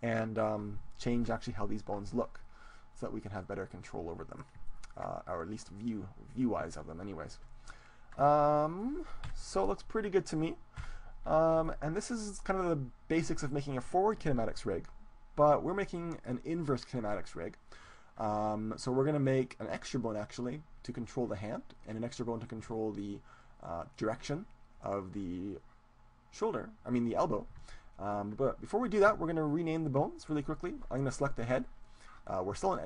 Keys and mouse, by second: 4.7-6.7 middle drag, 8.4-10.2 middle drag, 9.3 KP_7, 10.9 KP_1, 11.9-13.5 middle drag, 17.9-20.1 middle drag, 27.7-29.5 middle drag, 30.4-32.5 right drag.